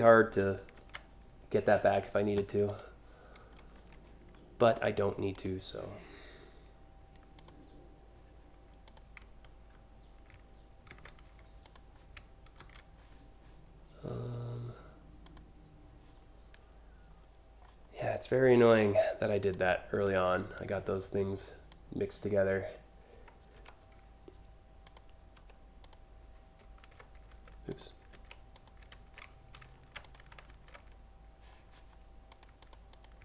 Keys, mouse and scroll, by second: 0.4 ctrl+v, 2.3 click, 5.0 click, 7.0 click, 8.5 click, 10.5 ctrl+c, 11.3 click, 12.2 ctrl+v, 14.9 click, 18.4 a, 19.0 click, 19.7 ctrl+click, 20.2-21.3 drag, 23.2 Delete, 24.5 click, 25.0 Delete, 25.4 click, 27.3 click, 28.1 click, 29.6 click, 31.9 click, 32.2 click, 32.6 click.